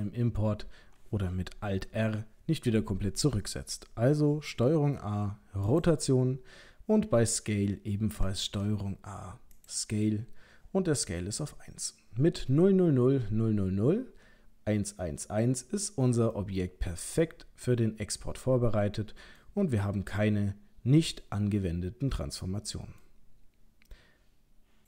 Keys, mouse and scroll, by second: 4.7 ctrl+a, 8.4 ctrl+a, 16.3 middle click, 19.7-20.2 scroll down 2, 20.2 middle click, 21.4-21.8 scroll up 2, 22.4 middle click.